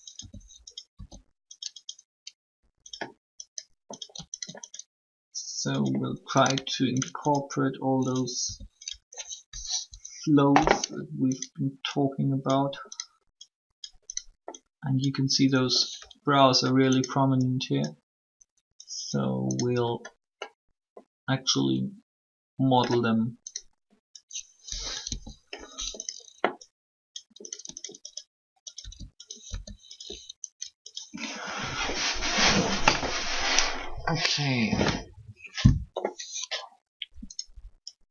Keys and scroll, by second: 0.0 r, 0.9 s, 8.4 shift+r, 9.8 1, 25.0 1, 28.8 s, 29.4 r.